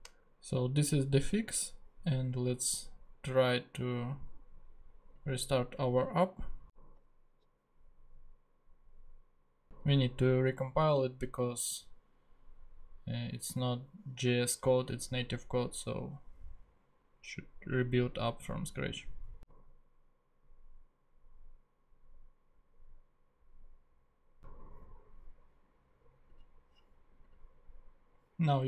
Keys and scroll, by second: 7.3 super+Tab.